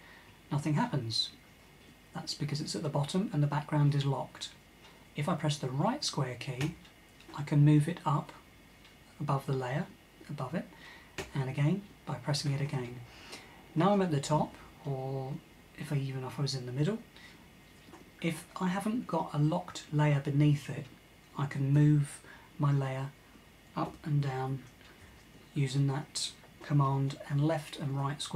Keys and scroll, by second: 6.3 super+], 10.8 super+], 15.4 super+[, 21.4 super+[, 23.5 super+], 23.9 super+], 24.5 super+[, 24.7 super+[.